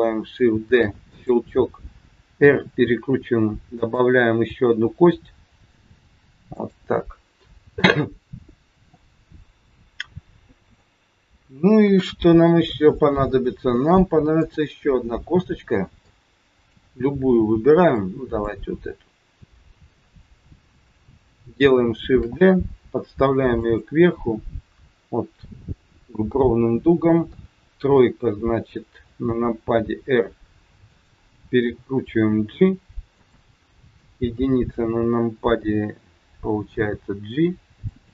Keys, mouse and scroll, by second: 0.7 shift+d, 2.4 r, 4.4 g, 8.7 scroll down 2, 9.4 middle click, 11.8 KP_1, 12.4-12.7 scroll up 3, 14.4 click, 16.1 click, 17.9 click, 20.2 click, 22.0 shift+d, 27.2 KP_3, 29.0 r, 31.6 g, 33.9 KP_1, 36.7 g.